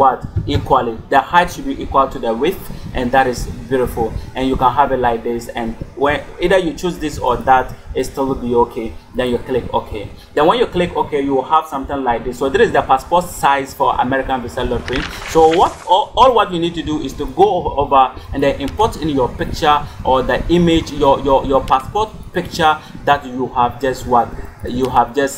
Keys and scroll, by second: 0.2 0.